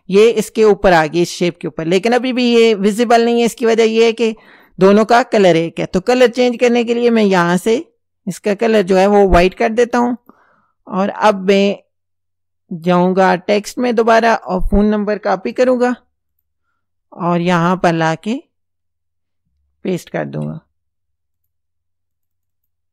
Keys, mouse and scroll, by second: 6.5 click, 7.7-9.6 drag, 10.2 click, 13.0 click, 14.1 click, 15.5 ctrl+c, 16.4 click, 17.4 click, 20.3 ctrl+v, 21.4 click, 22.2 click.